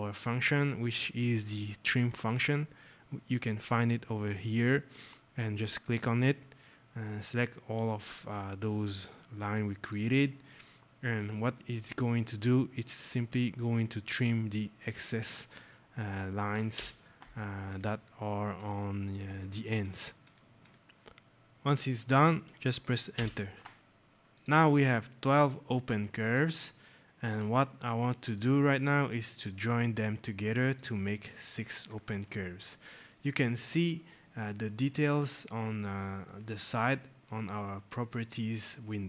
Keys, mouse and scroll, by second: 5.7 click, 10.4 scroll, 11.0 right click, 11.2 scroll, 11.7 scroll, 12.3 right click, 12.4-12.7 scroll, 13.4 scroll, 15.1 click, 16.6 Return, 17.6 click, 20.7 scroll, 23.0 Return, 23.9 scroll, 24.3 click.